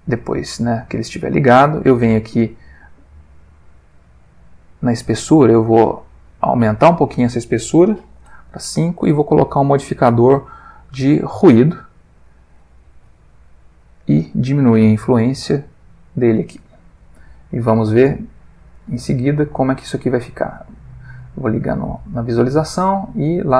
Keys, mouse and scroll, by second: 0.2 middle click, 0.8 middle click, 1.6 middle click, 3.8 click, 4.9 middle click, 6.9 ctrl+click, 8.1 5, 8.2 Return, 9.7 click, 11.2 click, 11.7-12.4 middle drag, 13.9-16.4 drag, 16.9 middle click, 17.5 ctrl+middle click, 20.1 ctrl+shift+click, 20.7 ctrl+shift+click, 21.1 ctrl+shift+middle click, 22.1-22.9 middle drag.